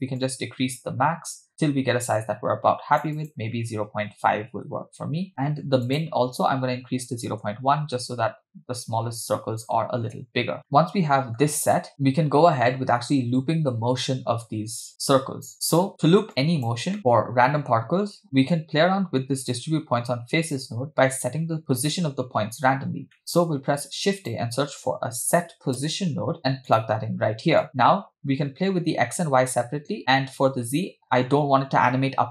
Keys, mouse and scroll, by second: 0.2-5.1 shift+drag, 5.9-7.4 drag, 10.6 click, 10.7 middle click, 11.4-11.8 scroll down 3, 15.7 scroll up 3, 15.9 click, 16.3 click, 18.2 click, 18.7-19.4 scroll up 1, 19.4 scroll up 2, 19.5-20.6 drag, 22.9 scroll down 3, 23.1 middle click, 23.4 shift+a, 27.6 click.